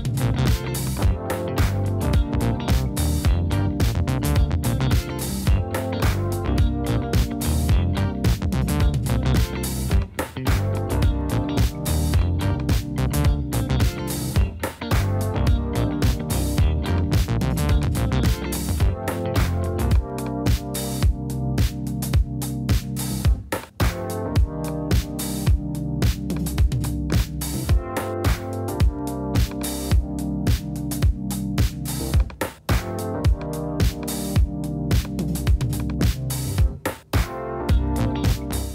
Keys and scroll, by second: 9.4 super+b, 10.0 super+BackSpace, 13.4 super+b, 14.5 super+=, 15.1 shift+super+=, 20.5 space, 23.2 space, 24.1 BackSpace, 27.3 space, 31.8 space, 32.7 BackSpace, 35.9 space.